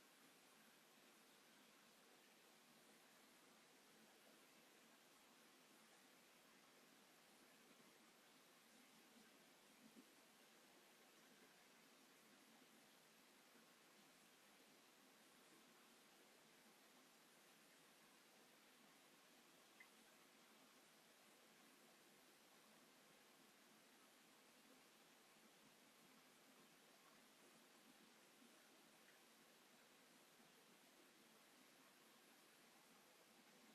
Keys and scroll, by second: 4.8 space, 5.6 m, 9.2 s, 11.1 p, 12.7 space, 15.7 space, 16.7 m, 17.8 q, 19.3 9, 19.5 Return, 20.1 m, 24.4 s, 25.5 space, 30.5 space, 32.3 space.